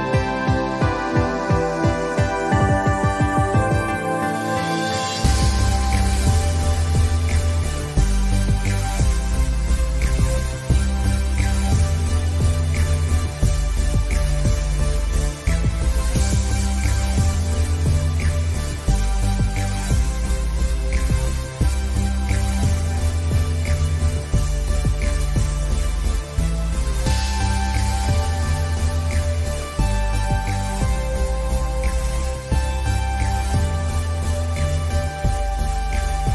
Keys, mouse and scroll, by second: 1.7 click, 1.8 space, 1.9 click, 2.1 space, 2.7 ctrl+z, 5.1-9.2 drag, 9.7 scroll up 1, 9.9 scroll down 1, 11.0 scroll up 2, 11.7-14.1 drag, 14.1 ctrl+z, 14.7 alt+click, 15.2 space, 15.4 click, 15.6 space, 16.2 click, 16.6 alt+scroll down 1, 17.5 alt+scroll up 1, 20.2 ctrl+z, 21.0 click, 24.2 ctrl+z, 24.9 scroll up 1, 25.3 click, 25.8 ctrl+z, 26.6-35.1 drag.